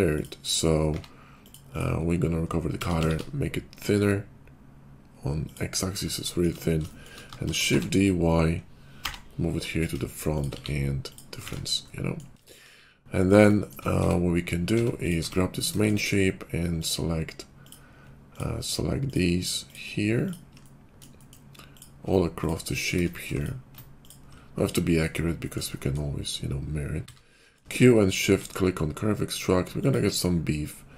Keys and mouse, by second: 0.8 q, 1.7 q, 2.7 s, 7.3 shift+d, 11.3 shift+q, 11.5 shift+2, 12.6 KP_5, 13.1 click, 13.4 shift+middle click, 14.0 Tab, 14.7 Tab, 15.2 Tab, 20.1 ctrl+click, 21.0 middle click, 21.1 shift+middle click, 21.9 middle click, 22.1-23.2 ctrl+middle drag, 23.3-28.3 shift+middle drag, 27.0 q, 29.8-30.9 drag, 29.8 q, 30.3 /.